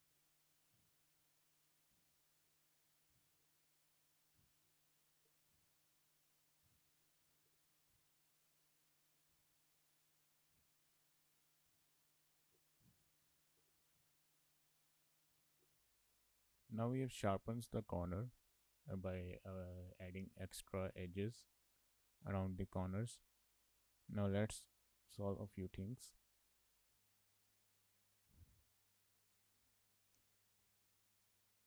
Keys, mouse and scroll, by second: 0.2 shift+middle click, 0.5 shift+middle click, 0.9 shift+middle click, 1.2 shift+middle click, 2.5 shift+middle click, 3.5 shift+middle click, 3.8 click, 4.6 g, 5.5 shift+middle click, 7.0 scroll down 1, 7.1 shift+middle click, 7.4 k, 12.8 shift+middle click, 13.1 shift+middle click, 13.5 k, 16.8 shift+middle click, 25.5 shift+middle click, 26.5-26.9 scroll up 4, 27.0 shift+middle click, 28.8 click, 29.6 g, 30.7 click.